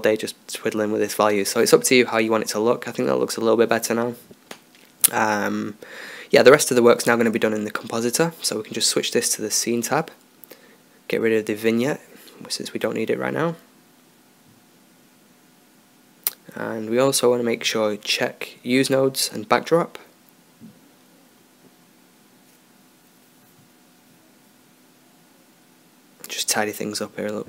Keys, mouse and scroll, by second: 0.7-5.8 middle drag, 5.8 ctrl+s, 8.7-12.4 drag, 13.0-14.9 drag, 13.9 x, 17.0-18.4 middle drag, 18.4-22.3 drag, 22.6-23.5 drag, 26.6 shift+a.